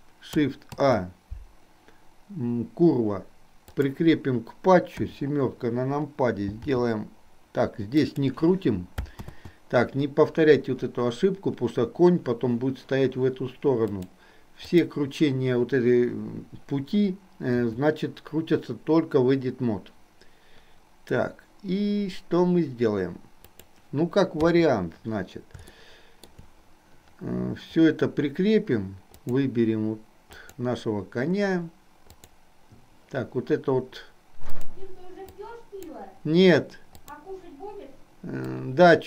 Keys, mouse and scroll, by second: 0.7 shift+a, 5.1 KP_7, 6.7 r, 9.4 ctrl+z, 13.9-15.1 drag, 17.6 r, 24.6 KP_3, 25.9 shift+middle click, 29.2 click, 32.1 click, 35.5 click, 37.0 click, 38.6-39.0 drag.